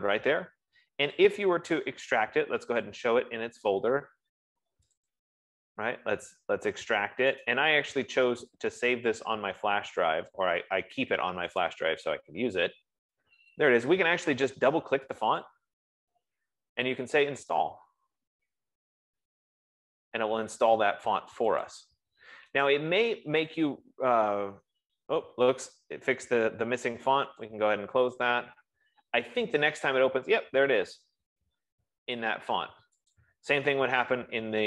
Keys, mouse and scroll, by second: 1.7 click, 3.2 click, 5.4 click, 7.7 F15, 7.9 right click, 9.7 click, 12.0 click, 15.5 click, 15.7 click, 17.9 click, 22.2 click, 28.0 click, 33.6 click.